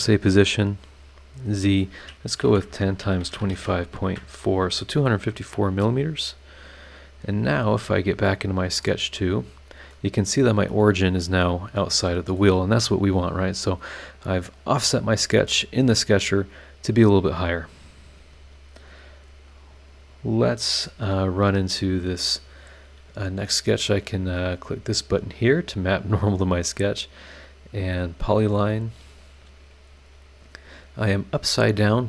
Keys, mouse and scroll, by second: 1.3 click, 2.4-3.5 typing, 2.7 KP_Multiply, 4.0 KP_Enter, 5.3 scroll down 2, 7.7 click, 8.4 scroll down 2, 8.8-10.1 middle drag, 8.8-10.1 drag, 8.8-10.1 right drag, 10.7-12.6 middle drag, 10.8-12.6 drag, 10.8-12.6 right drag, 13.9 scroll up 2, 15.0 scroll down 2, 15.6-16.0 scroll up 2, 20.6 click, 24.9 click, 25.6-25.9 scroll down 2, 26.2-26.9 scroll up 4.